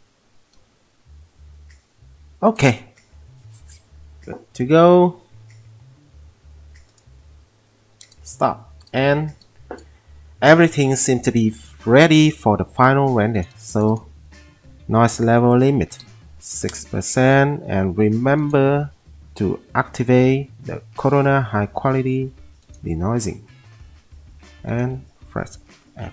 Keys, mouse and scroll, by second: 16.1 6, 16.7-18.9 click.